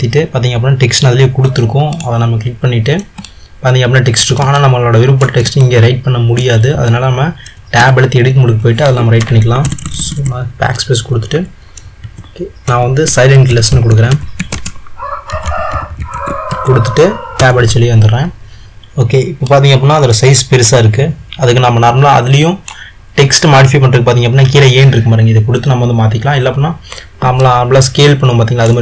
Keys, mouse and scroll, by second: 3.4-8.0 middle drag, 8.0 Tab, 9.7-10.1 BackSpace, 17.5 Tab, 19.6 click, 27.5-28.8 middle drag.